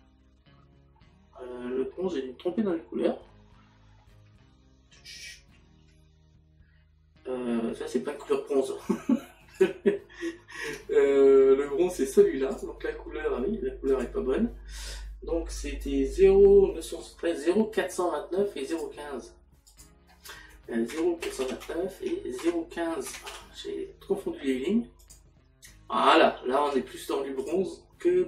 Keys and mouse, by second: 9.9 click, 10.7 Tab, 20.6 click, 20.9 KP_Decimal, 21.9 KP_9, 22.4 KP_Decimal.